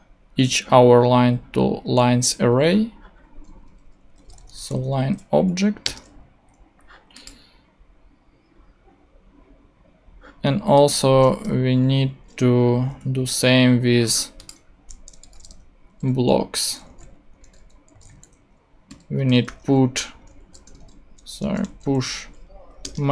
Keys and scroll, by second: 3.9-4.9 typing, 5.4 Down, 5.8 Return, 11.2 Return, 12.7 Up, 12.9 super+x, 15.0-22.1 typing, 22.8 Return.